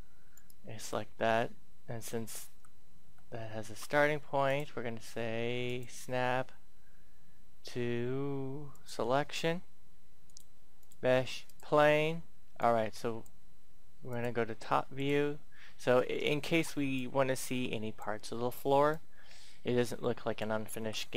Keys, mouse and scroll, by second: 0.7 right click, 1.3 middle click, 2.5 a, 3.0 Tab, 4.3-20.6 drag, 20.3-21.1 typing.